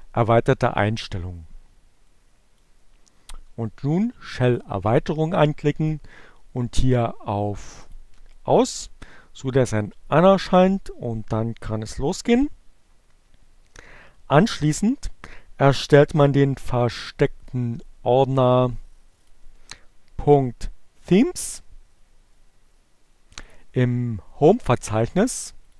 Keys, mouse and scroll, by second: 2.1 click, 5.2 click, 7.9 click, 15.8 click, 22.1-23.3 drag.